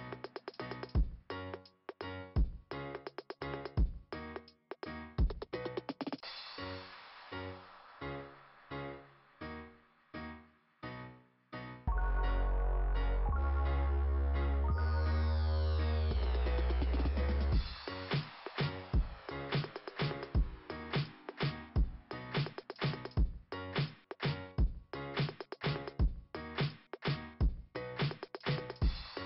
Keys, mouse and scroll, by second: 0.0 click, 0.5 click, 3.4 click, 4.4-5.0 scroll up 4, 4.7 click, 6.9 scroll down 2, 8.1 click, 9.3 scroll up 2, 16.1 scroll down 2, 17.5 click, 20.1 right click, 21.7 click, 22.6 right click, 22.8 right click, 24.1 click, 25.2 click, 26.3 click, 27.5 click.